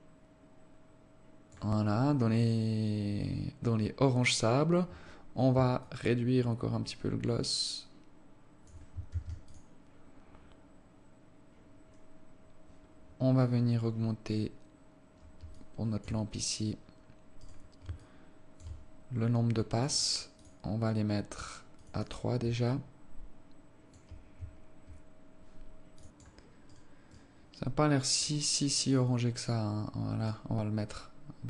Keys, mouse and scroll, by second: 3.0 scroll down 4, 3.8-5.4 scroll down 1, 5.4 scroll down 1, 6.3 shift+click, 9.6 ctrl+s, 16.0 alt+click, 16.7-17.5 scroll down 8, 17.9 right click, 18.5 alt+shift+click, 20.3 click, 20.4 click, 20.7 click, 21.0 click, 22.3 click, 22.7 click, 23.3 alt+click, 27.1 right click, 27.7 right click, 28.7 click.